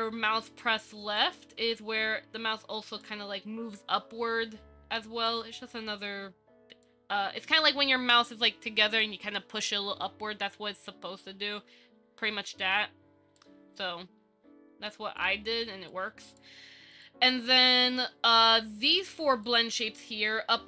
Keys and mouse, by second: 1.4-3.2 drag, 5.5-7.0 drag, 13.6-15.4 drag, 16.1 click.